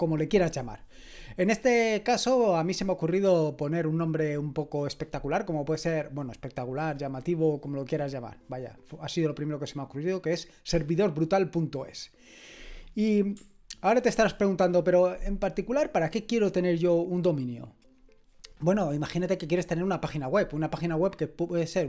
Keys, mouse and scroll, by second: 14.1 ctrl+1.